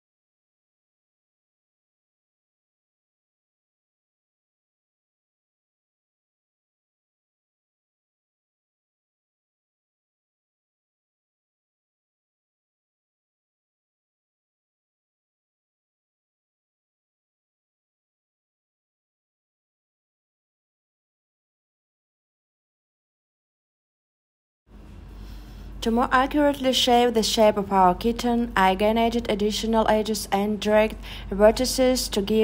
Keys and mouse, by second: 1.9 e, 4.1 click, 5.6 s, 7.4 click, 7.9 click, 13.5 f, 16.9 click, 17.8 click, 18.7 click, 19.8 click, 20.7 click, 22.0 click, 24.7 click, 27.6 click, 28.5 click, 29.2 click, 30.7 click.